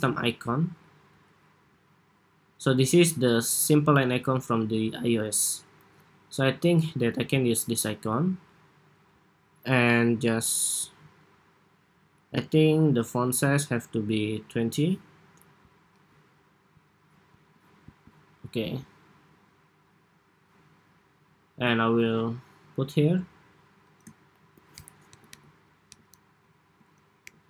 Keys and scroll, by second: 24.8 alt+Down, 25.0 alt+Down, 25.7 alt+Down.